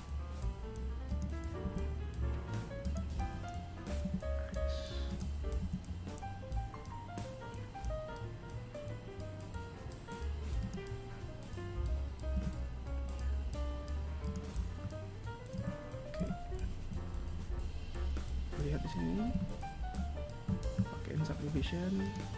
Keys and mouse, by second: 5.2 e, 11.9 s, 15.1 a, 15.7 z, 21.6 click.